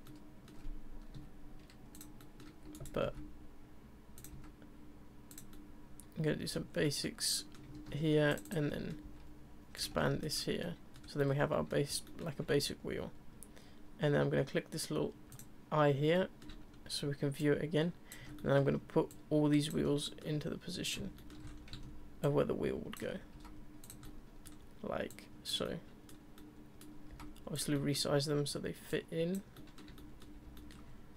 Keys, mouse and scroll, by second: 0.0-1.1 middle drag, 2.2 middle click, 2.4 e, 3.0 alt+s, 4.3 s, 5.5-6.7 middle drag, 6.7 scroll down 3, 6.8 middle click, 7.3 scroll up 1, 7.4 middle click, 7.7 ctrl+r, 8.7 middle click, 9.0 s, 9.9 Tab, 10.0 middle drag, 10.3-10.6 scroll down 2, 10.6-11.0 middle drag, 11.0 scroll down 2, 11.2-15.1 middle drag, 15.3 click, 16.1-16.6 middle drag, 16.6-17.4 scroll down 1, 17.4 ctrl+click, 18.4-19.1 middle drag, 19.1 ctrl+click, 20.0 middle click, 20.8 click, 21.2 shift+middle drag, 21.4 scroll up 4, 22.2 ctrl+click, 23.3 s, 24.0-24.5 middle drag, 24.5 scroll down 1, 25.1 click, 25.6-26.1 middle drag, 26.1 scroll down 1, 26.3-26.8 middle drag, 26.8 scroll down 1, 27.1 s, 27.7-28.9 middle drag, 28.9 click, 29.5-31.1 middle drag.